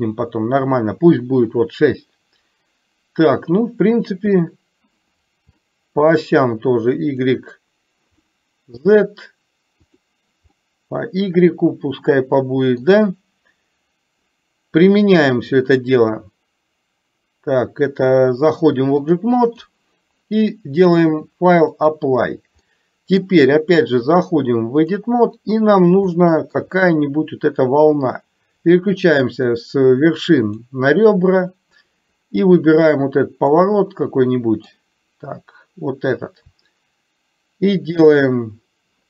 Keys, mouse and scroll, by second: 4.3 click, 5.7 shift+middle click, 7.3 click, 8.2 middle click, 9.9 click, 10.7-12.8 middle drag, 15.7-18.2 drag, 19.2 click, 20.9 click, 22.8 middle click, 24.2-25.1 drag, 26.3 shift+middle click, 29.4 click, 30.6 click, 33.7-34.8 middle drag.